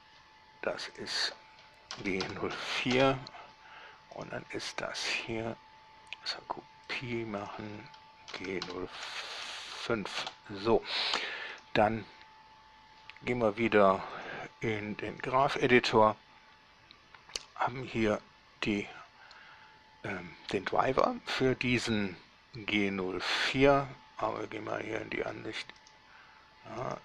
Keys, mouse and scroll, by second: 1.2 click, 2.2 shift+g, 2.5 0, 2.8 4, 3.2 Return, 4.5 right click, 7.1 drag, 7.7 click, 8.5-9.9 typing, 10.5 Return, 11.8 right click, 14.4-14.7 drag, 15.4 click, 24.5 scroll down 2, 24.9-25.7 middle drag, 26.1 right click.